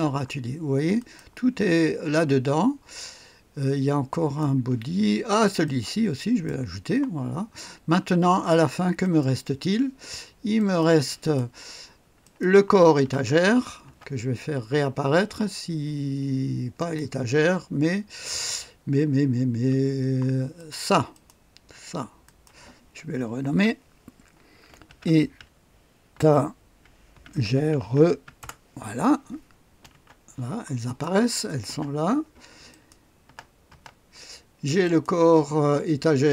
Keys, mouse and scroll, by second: 1.0 click, 2.0 click, 4.1 click, 5.6-7.1 drag, 9.0 middle click, 9.2 click, 10.6 middle click, 10.8 click, 11.2 middle click, 11.4 click, 12.2 click, 13.0 space, 13.8 space, 15.1 space, 16.8 click, 19.7 space, 20.5-22.1 drag, 22.2-23.4 drag, 23.5 F2, 24.8-28.8 typing, 29.9 space, 30.8 click, 31.7 space, 32.7 click, 33.2-33.7 typing, 34.8 click, 35.7-36.3 typing.